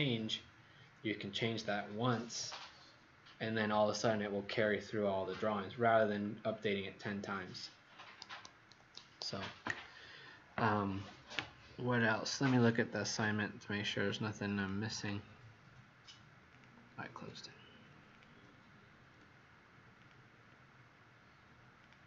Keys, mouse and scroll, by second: 14.5 click.